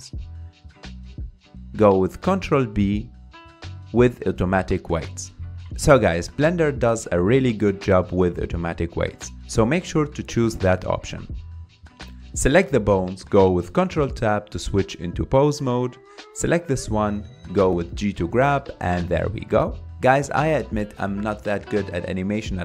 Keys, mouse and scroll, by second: 0.0 shift+click, 3.2 ctrl+p, 12.8 click, 14.6 ctrl+Tab, 15.1 click, 16.0 g, 19.3 scroll down 3, 19.6-20.2 middle drag, 20.2 g.